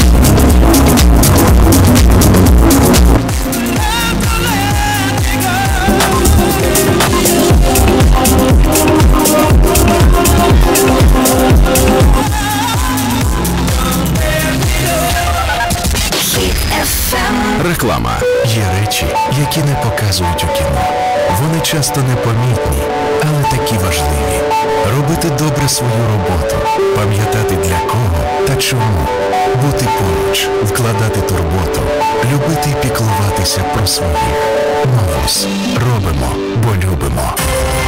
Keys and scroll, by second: 3.1 Page_Down, 12.0 Page_Down.